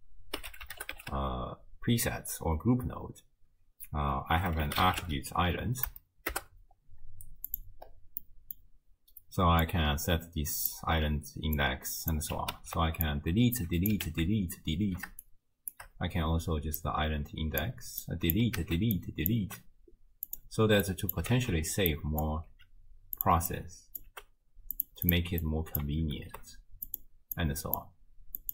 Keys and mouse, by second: 8.2 middle click, 9.7-10.8 drag, 11.7 click, 12.6 ctrl+x, 13.1-13.9 drag, 14.1 ctrl+x, 15.2 shift+click, 18.1-18.4 drag, 18.6 ctrl+x, 19.0-19.4 drag, 19.4 g, 21.0 click, 21.3 ctrl+x, 21.9-22.3 drag, 22.5 g, 23.5-24.1 drag, 24.1 g, 25.1 click, 25.5 click, 26.2 ctrl+h, 26.9 click, 27.4 click, 27.6 click.